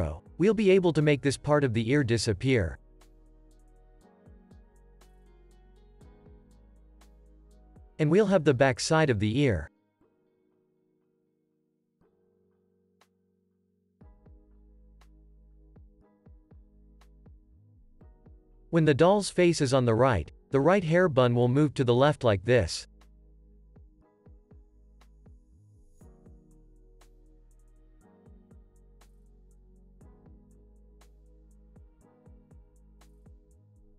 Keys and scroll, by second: 18.1 p, 19.6 x, 26.9 shift+r, 28.1 z, 29.3 x.